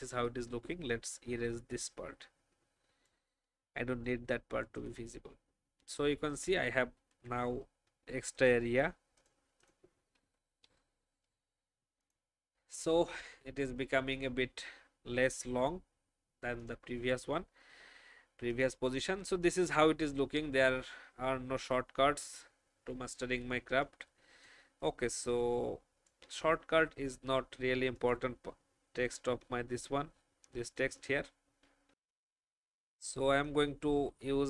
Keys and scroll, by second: 0.2 n, 10.1 shift+Up, 23.6 space, 24.9 space, 29.3 alt+space, 31.8 F10, 32.6 alt+F10, 33.6 alt+F10.